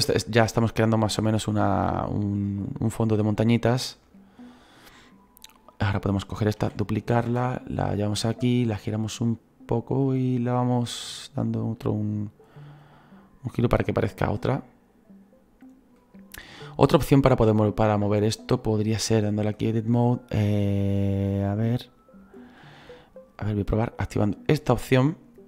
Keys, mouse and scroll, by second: 4.0 s, 5.5-6.6 right drag, 6.6 shift+d, 7.9-16.4 drag, 16.4 scroll up 3, 16.8-19.5 middle drag, 19.5-24.6 drag, 24.8-25.4 drag.